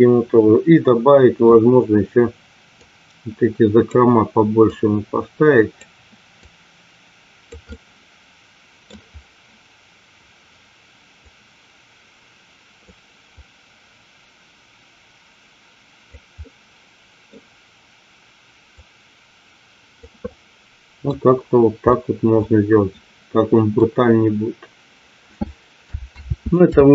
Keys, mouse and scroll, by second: 2.8-3.8 drag, 4.8-6.1 drag, 6.5-7.5 drag, 7.6-8.8 middle drag, 11.3-13.1 drag, 13.6-16.1 drag, 16.3 middle click, 18.8-20.0 drag, 20.2 middle click, 21.9-23.6 middle drag, 26.2 ctrl+z, 26.8 ctrl+z.